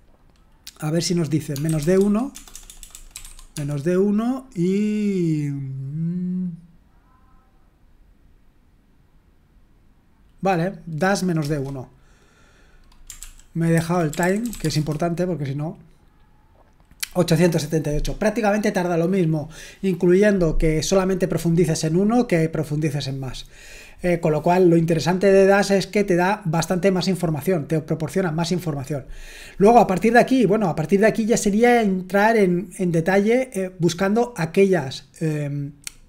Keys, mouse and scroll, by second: 1.4-3.7 typing, 11.4 Return, 13.2 ctrl+p, 13.7 ctrl+a, 13.8-15.0 typing.